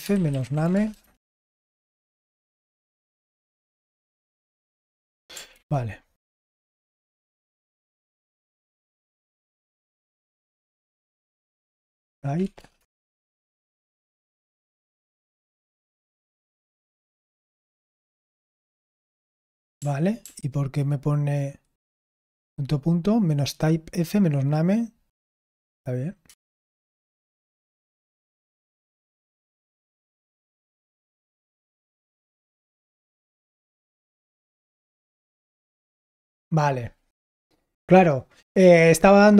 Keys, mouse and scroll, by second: 0.0-6.0 typing, 7.1-7.5 typing, 7.5 Return, 11.5-12.8 typing, 14.6 ctrl+p, 19.7 ctrl+p, 20.2 ctrl+p, 27.1 Return, 33.4 ctrl+p, 33.9-35.1 typing.